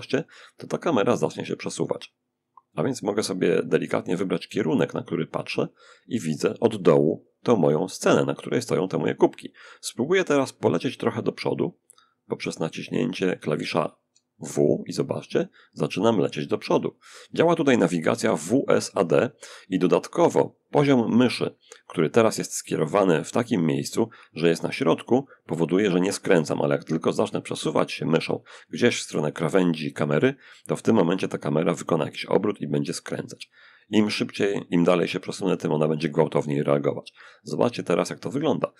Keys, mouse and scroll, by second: 13.0 w, 13.4 w, 13.6 w, 15.6 w, 15.9 w.